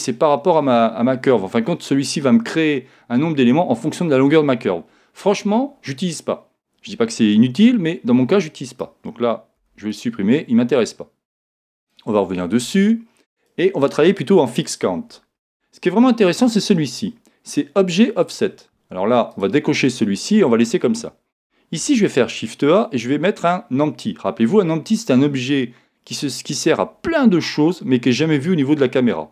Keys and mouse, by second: 8.7 right click, 9.6 x, 11.8 right click, 13.4 click, 19.3 click, 21.8 shift+a.